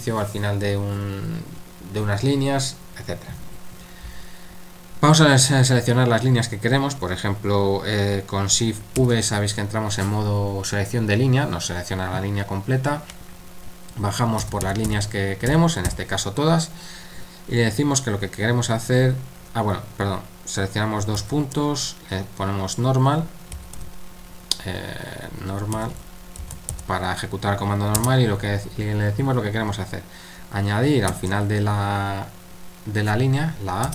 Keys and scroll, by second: 14.6-15.9 typing, 23.3-24.0 typing, 25.5-27.2 typing, 31.1 shift+a.